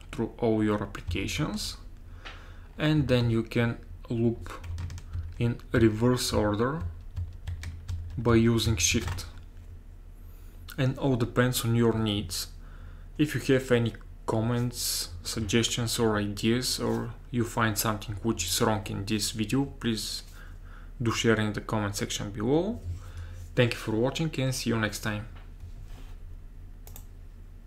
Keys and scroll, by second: 1.1 alt+Tab, 5.2 alt+Tab, 5.8 alt+Tab, 6.4 alt+Tab, 6.8 alt+Tab, 7.2 alt+Tab, 7.5 alt+Tab, 7.9 alt+Tab, 8.3 alt+Tab, 8.7 alt+Tab, 8.9 alt+Tab.